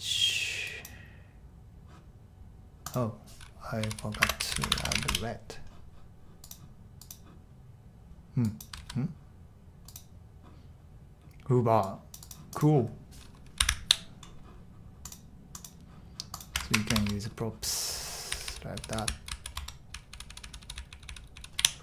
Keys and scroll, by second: 3.6-5.5 typing, 8.8 super+r, 13.3-14.1 typing, 16.6 shift+Tab, 16.9 shift+Tab, 18.0-21.8 typing.